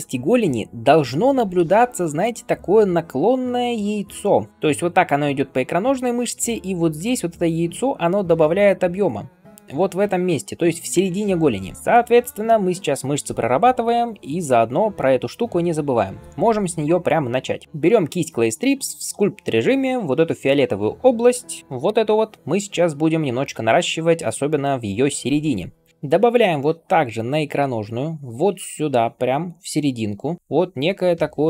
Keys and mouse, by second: 1.1-11.7 drag, 11.7 d, 14.0-15.3 right drag, 21.6 h, 21.8 h, 23.3 [, 23.3 [, 23.4 [, 23.5 [, 30.4 d.